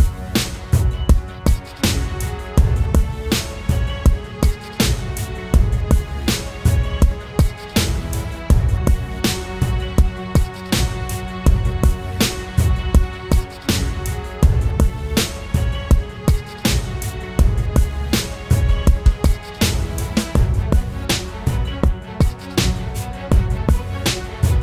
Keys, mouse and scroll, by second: 0.3 typing, 1.7 typing, 1.7 double click, 2.7 ctrl+=, 3.1 ctrl+-, 3.3 ctrl+-, 5.0 ctrl+=, 5.5 ctrl+-, 7.2-8.1 alt+scroll down 1, 14.7 ctrl+z, 17.1 Delete, 19.6 double click.